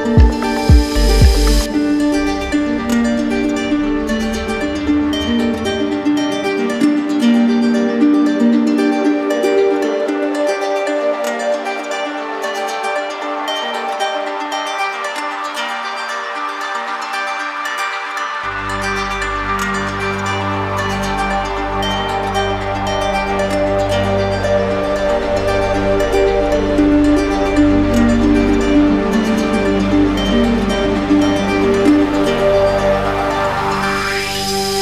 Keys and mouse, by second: 1.1 click, 2.5 click, 3.0 ctrl+click, 4.4 ctrl+click, 10.5 click, 15.0 right click, 16.5 right click, 18.3 right click, 22.7 right click, 27.1 alt+click, 27.8 right click, 28.3 shift+right click, 31.5 right click, 32.2 shift+right click, 33.5 right click.